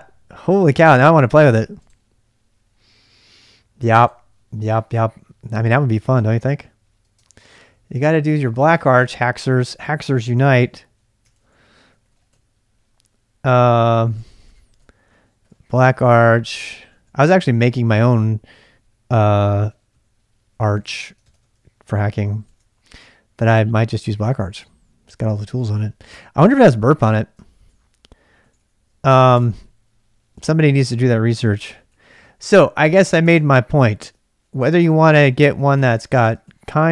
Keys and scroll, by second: 6.2 ctrl+a, 6.4 ctrl+a, 7.0-9.2 typing, 10.6 ctrl+q, 11.3 ctrl+[, 11.3 ctrl+j, 11.6-16.0 typing, 16.0 ctrl+a, 17.9 ctrl+a, 18.1 ctrl+a, 19.6 ctrl+a, 19.9 ctrl+a, 20.6 ctrl+a, 20.8 ctrl+a, 20.9-26.1 typing, 23.4 ctrl+[, 24.3 ctrl+[, 27.5-32.7 typing, 28.4 ctrl+a, 28.6 ctrl+a, 33.3 super+Tab, 34.0 super+Tab, 34.3-36.9 typing.